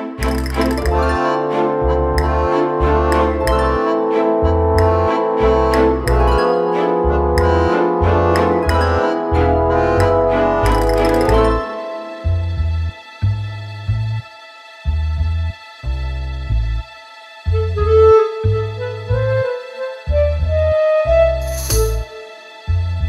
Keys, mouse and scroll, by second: 3.5 click, 4.4 click, 5.3 click, 5.9 middle click, 7.5 scroll up 2, 8.1 shift+middle click, 8.8 scroll up 1, 9.0 middle click, 11.4 middle click, 12.5 middle click, 15.4 click, 16.1-19.2 typing, 20.7 shift+right click, 21.1 shift+a, 22.4 s.